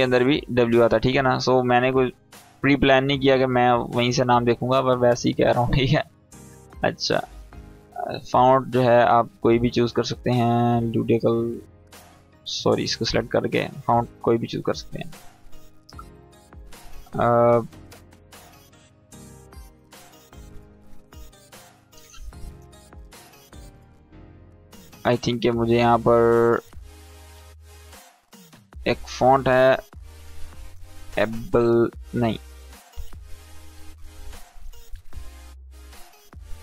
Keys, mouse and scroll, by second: 3.2-4.1 click, 6.8 click, 7.6-8.3 scroll down 1, 8.3 click, 10.6 click, 13.9 Down, 14.6 Up, 23.6 Up, 26.5-30.1 drag, 32.7 Down, 33.4 Up, 33.7 Down.